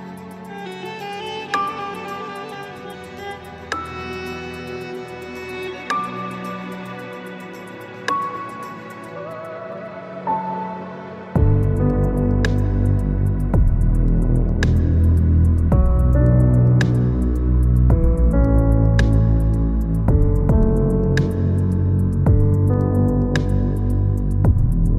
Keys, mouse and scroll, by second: 1.6 Tab, 2.4-4.2 middle drag, 4.2-4.8 scroll down 2, 4.8-5.6 middle drag, 5.6 s, 8.4-11.2 middle drag, 11.2 s, 13.2-14.6 middle drag, 14.6 s, 15.3 s, 18.5 click, 18.6 Tab, 19.0-23.2 middle drag, 23.2 alt+shift+click, 23.8-24.9 middle drag.